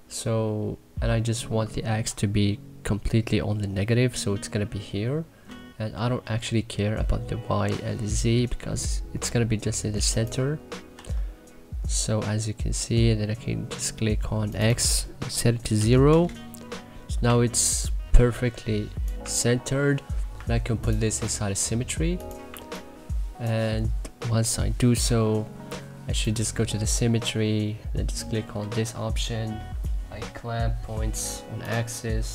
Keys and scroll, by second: 10.9 e, 15.7 0, 16.1 Return, 17.2 2, 19.2 1, 22.4 1.